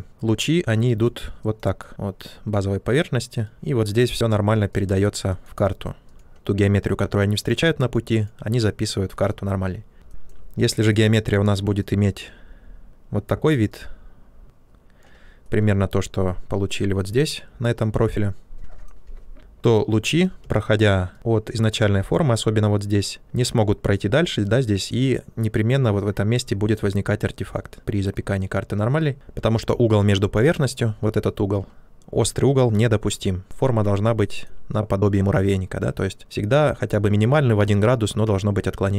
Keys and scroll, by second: 9.9 c, 20.4 space, 29.1 ctrl+z.